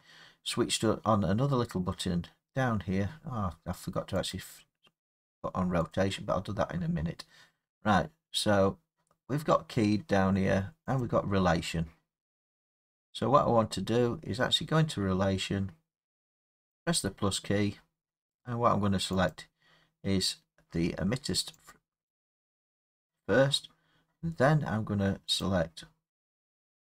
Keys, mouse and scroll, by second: 4.3 click, 5.9 click, 11.0 click, 16.7 click, 19.3 click, 21.7 click, 25.4 click.